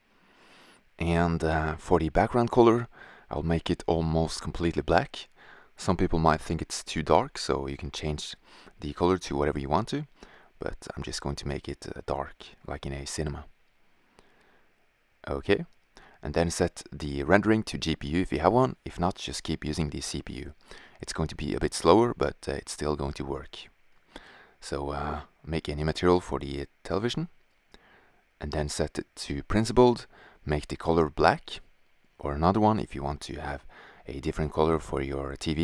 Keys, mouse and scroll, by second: 8.7-10.7 drag, 12.8 drag, 13.0 middle click, 14.5-14.9 middle drag, 14.9-15.2 scroll up 1, 15.2-17.3 drag, 19.9 shift+z, 21.8-23.1 drag, 25.2-27.7 drag, 29.4-30.7 drag.